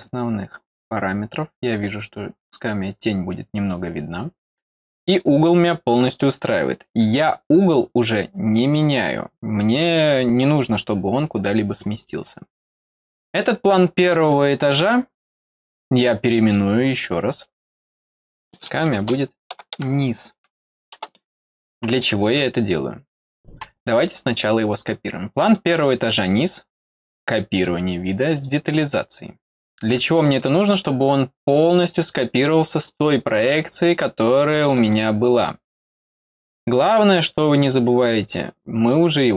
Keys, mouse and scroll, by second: 1.9 click, 4.2 middle click, 4.5 middle click, 14.7 right click, 16.4 click, 17.6 click, 18.2 click, 25.4 right click, 27.5 click, 28.3 click, 31.7 click, 32.8 click, 33.0 click, 33.7 click, 33.9 click, 34.6 click, 34.8 click.